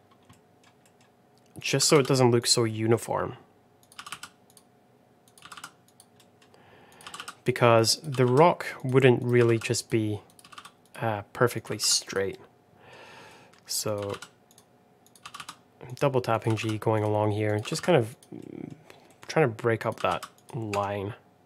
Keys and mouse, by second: 0.2 middle click, 0.7 middle click, 1.7 g, 2.6 middle click, 3.9 g, 5.4 g, 6.1 middle click, 7.1 g, 8.0 g, 9.1 click, 9.3 g, 10.5 g, 11.5 click, 11.7 g, 12.2 middle click, 13.2 middle click, 13.8 click, 13.9 g, 15.0 click, 15.2 g, 16.5 g, 17.6 g, 18.3 middle click, 19.0 middle click, 19.7 click, 19.9 g, 21.2 Tab.